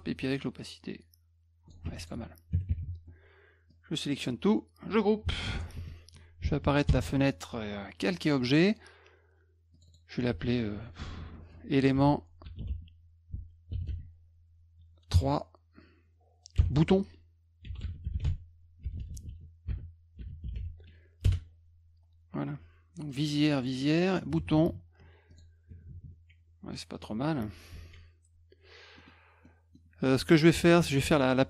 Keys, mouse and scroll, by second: 0.6-1.7 drag, 1.9 F1, 2.0 click, 3.7-4.2 drag, 5.6 ctrl+g, 6.9 ctrl+shift+l, 9.7 click, 9.9 click, 11.7-14.4 typing, 16.6-21.1 typing, 21.2 Return, 23.1 click, 23.5 click, 25.3 click, 26.9 click, 27.8 s, 29.0-29.7 scroll up 4.